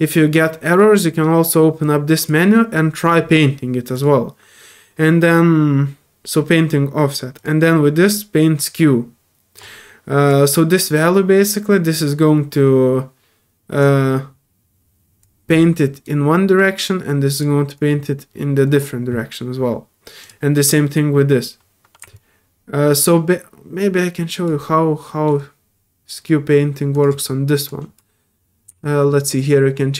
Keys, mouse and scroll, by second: 1.8-2.2 drag, 3.9 click, 7.3 click, 8.6 click, 10.3-13.8 drag, 15.2 click, 17.1 click, 17.7-18.8 drag, 20.2 click, 22.1-24.4 alt+drag, 24.6-25.2 alt+middle drag, 26.9 alt+click, 27.7 alt+click.